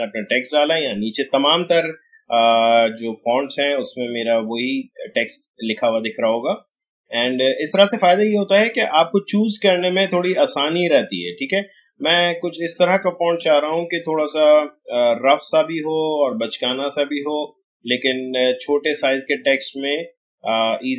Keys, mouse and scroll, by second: 2.0 scroll down 1.